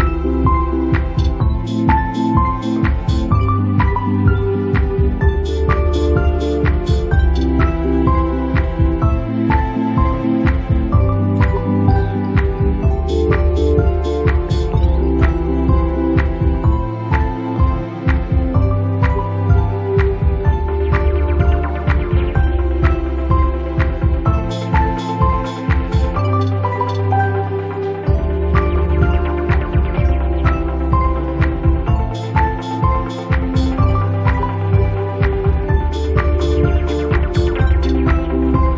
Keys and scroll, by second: 2.1 space, 6.0 ctrl+shift+q, 8.8 space.